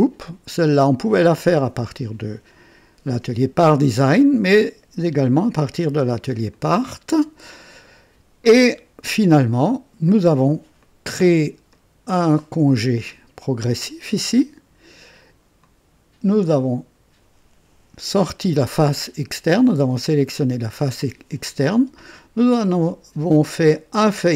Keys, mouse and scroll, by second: 6.4-7.2 drag, 9.0-10.5 drag, 10.8 click, 11.7 click, 15.6 click, 18.7-19.6 drag.